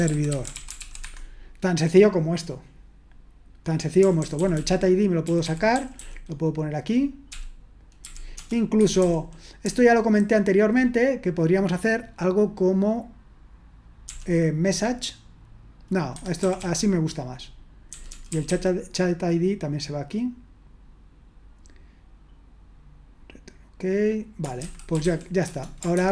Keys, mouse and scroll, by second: 0.0-0.8 typing, 0.9 Escape, 4.5-6.2 typing, 8.8 Escape, 8.9 typing, 10.2-10.6 typing, 16.4 typing, 18.4 typing, 25.2-25.9 typing, 25.9 ctrl+p.